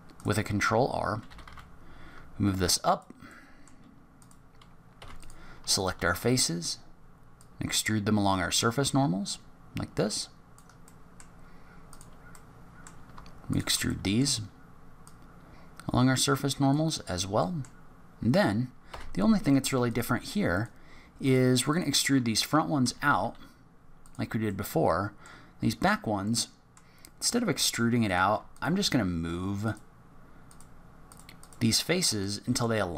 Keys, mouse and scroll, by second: 0.1 click, 1.2 g, 3.2 middle click, 4.1 click, 4.9 3, 5.1 click, 5.7 shift+click, 7.3 click, 10.8 middle click, 11.4 scroll up 3, 11.8 click, 12.3 middle click, 13.5 shift+click, 13.8 middle click, 15.0 click, 17.0 scroll down 3, 17.4 middle click, 18.8 3, 19.4 click, 19.8 shift+click, 20.5 click, 21.2 click, 21.6 click, 22.8 e, 24.5 middle click, 25.5 scroll down 4, 25.8-26.4 scroll up 3, 26.2 middle click, 26.9-28.0 scroll up 2, 28.0 click, 28.0-28.3 scroll up 1, 28.5 shift+click, 29.6 click, 30.4 click, 31.0 shift+click, 31.3 shift+click, 32.2 middle click.